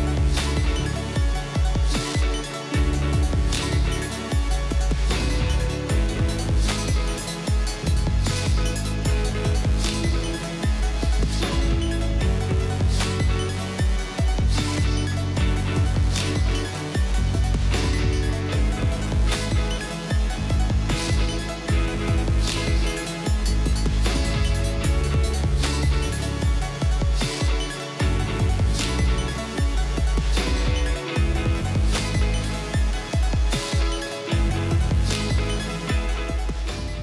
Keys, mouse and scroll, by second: 0.3 scroll down 6, 0.4 j, 0.6 j, 0.7 scroll up 6, 1.3-1.7 scroll down 5, 1.7-2.2 scroll up 2, 2.2 j, 2.3 scroll down 8, 2.4 j, 2.8 scroll up 2, 2.9 scroll down 5, 3.1 scroll up 5, 3.8 scroll up 8, 4.7 j, 4.8-5.3 scroll down 18, 5.3 j, 5.5 j, 5.6 j, 5.9 scroll up 10, 6.8-7.3 scroll up 7, 7.3-9.4 typing, 7.4 scroll down 12, 8.3 scroll down 3, 9.0 scroll up 9, 9.3 scroll down 4, 9.5-10.2 scroll up 4, 10.3 scroll down 10, 10.7 scroll up 11, 11.4 j, 11.6-12.0 scroll down 9, 12.0 j, 12.3 scroll up 3, 12.4 j, 12.5 j, 12.8-13.9 scroll up 9, 13.9 j, 14.0-14.6 scroll down 11, 14.2 j, 14.6-15.5 scroll up 9, 14.8 j, 15.5-16.2 scroll up 8, 16.2 double click, 16.3-17.3 scroll down 11, 17.3 scroll up 1, 17.5 scroll down 3, 17.6-18.3 scroll up 9, 18.3 j, 18.5-18.8 scroll down 10, 18.8-19.6 scroll up 5, 18.8 j, 19.8-20.8 scroll up 3, 20.8-21.7 scroll up 6, 21.7 scroll down 3, 21.9 scroll up 5, 23.1-23.4 scroll down 10, 23.4-23.9 scroll up 7, 23.5 j, 23.6 j, 24.5-25.1 scroll up 5, 25.1 scroll down 13, 25.4 j, 25.5 j, 25.7-26.6 scroll up 2, 26.6 j, 26.8-27.4 scroll down 9, 27.4 j, 27.5-29.6 scroll up 12, 29.7 j, 29.9 scroll down 8, 30.0 j, 30.1 scroll up 13, 32.4-37.0 typing, 32.6-33.1 scroll down 16, 36.6 scroll up 2.